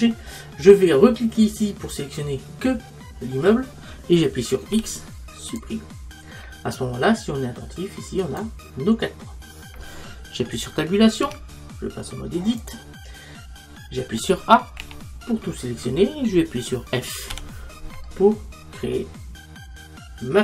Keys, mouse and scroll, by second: 1.4-4.7 right drag, 4.7 x, 8.3-11.3 right drag, 11.3 Tab, 14.8 a, 17.3 f, 18.1-20.4 middle drag.